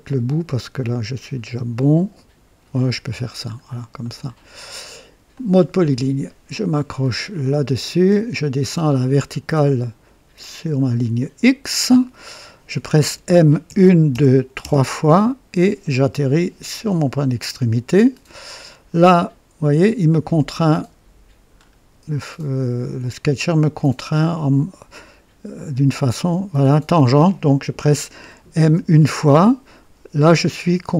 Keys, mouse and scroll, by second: 2.1 click, 2.8-3.2 scroll down 2, 3.5 scroll down 2, 4.0 right click, 5.3 click, 7.3 click, 8.8 scroll up 2, 11.1 click, 11.9 right click, 13.6-14.5 typing, 16.8 click, 21.5-21.8 scroll up 2, 22.1 scroll up 2, 28.6 typing.